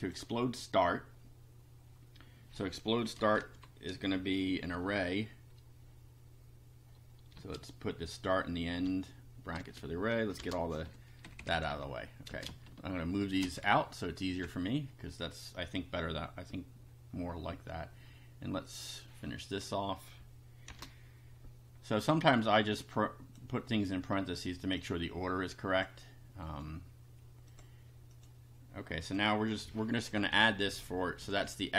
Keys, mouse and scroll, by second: 0.0 click, 3.4 shift+9, 3.9 shift+space, 4.7 [, 7.4 space, 8.8-11.2 typing, 12.3 space, 13.4 BackSpace, 18.7 click, 20.7 shift+9, 22.9 click, 24.8-26.0 drag, 26.4 right click, 27.5 click, 28.2 click, 29.0 click, 30.2 Left, 31.2 ctrl+v.